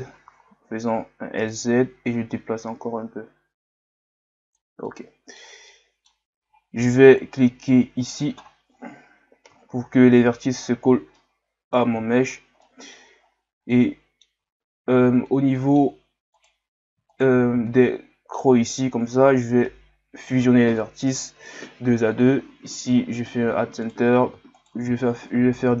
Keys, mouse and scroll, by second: 2.1-4.8 drag, 4.8-8.1 middle drag, 8.1 click, 8.9-9.7 scroll down 1, 10.4 middle click, 10.7-11.2 scroll up 1, 11.2-12.2 middle drag, 12.2-12.6 scroll up 4, 12.6 middle click, 13.2-13.7 scroll down 4, 13.7 middle click, 14.6 scroll down 2, 14.9-15.2 scroll up 1, 15.2-16.4 middle drag, 16.4 right click, 17.1 shift+right click, 17.7-20.8 middle drag, 22.9 scroll up 5, 23.9 right click, 24.6 shift+right click, 25.0-25.8 scroll up 3.